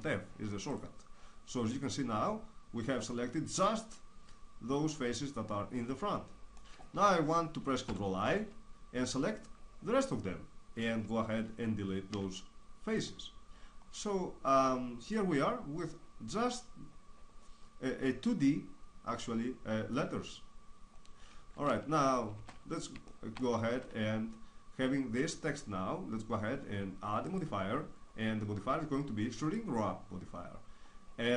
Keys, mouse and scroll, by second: 2.1-3.5 middle drag, 7.9 ctrl+i, 9.4-11.0 middle drag, 12.1 x, 13.8 middle click, 14.2 middle click, 20.4-22.3 middle drag, 22.3 shift+space, 23.7 Tab, 28.8-30.0 drag, 30.3 middle click.